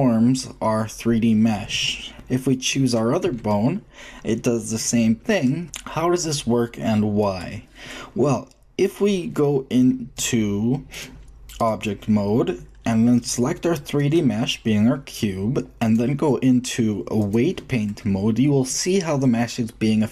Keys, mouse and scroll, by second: 2.5-4.3 drag, 3.2 g, 10.9-12.8 drag, 13.9-17.6 drag.